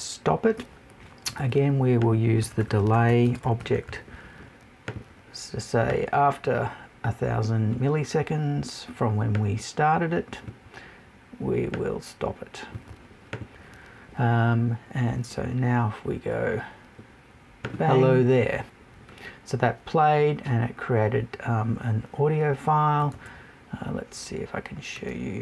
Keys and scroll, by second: 23.1 super+Tab.